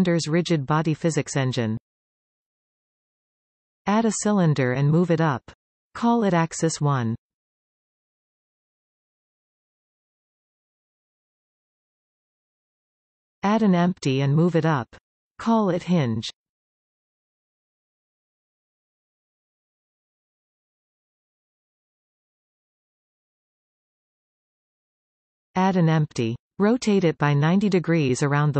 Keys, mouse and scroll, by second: 4.6 shift+a, 9.4-18.4 ctrl+drag, 11.7 Return, 13.2 shift+a, 18.0 s, 20.0 scroll down 1, 20.3 g, 21.4 click, 22.7-25.9 ctrl+drag, 24.4 Return, 25.9-28.5 middle drag, 26.7 shift+a, 28.3 s.